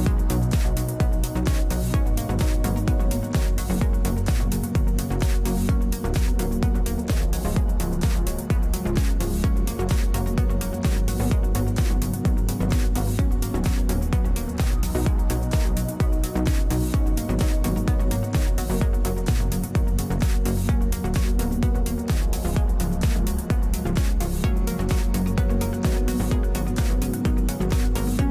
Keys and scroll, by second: 3.5 space, 4.4 space.